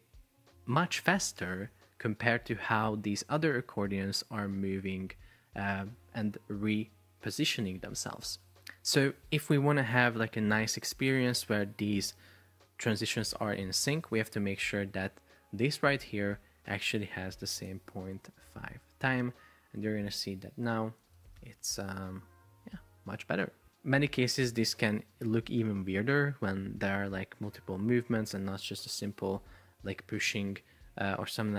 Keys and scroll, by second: 18.2 Return, 21.4 super+p.